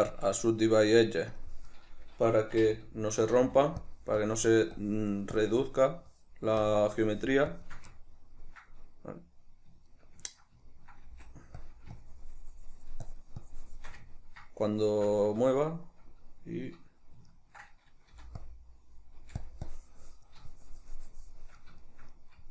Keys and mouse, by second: 2.7 typing, 4.3-8.1 drag, 8.1-11.8 ctrl+middle drag, 11.2 f, 12.1-14.2 shift+drag, 14.2-18.6 ctrl+middle drag, 18.2 f, 18.6 click, 19.3 f, 19.8-22.0 drag, 22.0-22.5 shift+middle drag.